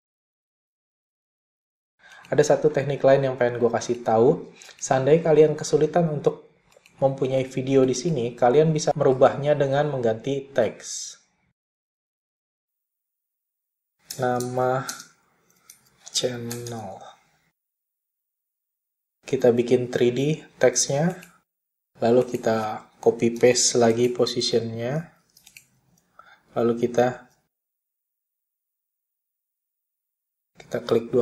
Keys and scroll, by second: 2.1 ., 13.8-17.6 typing, 23.1 p, 24.5 super+c, 26.4 super+v, 28.3 p.